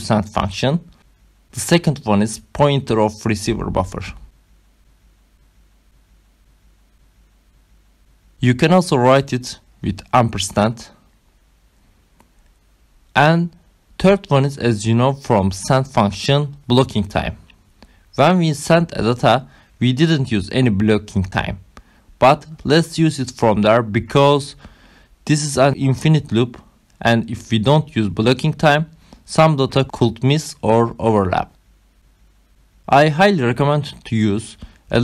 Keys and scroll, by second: 0.7 ,, 1.6 space, 6.3 shift+6, 8.9-10.6 typing, 10.7 Right, 12.3 space, 13.3 ,, 15.7-17.8 typing, 17.9 Return, 20.1 5, 20.6 Right, 22.5 shift+9, 24.1 BackSpace.